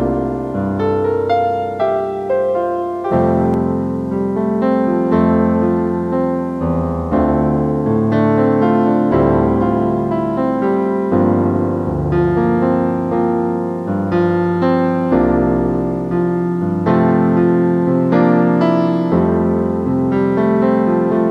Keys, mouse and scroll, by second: 2.5 typing, 7.4 double click, 10.4 F9, 13.7 q.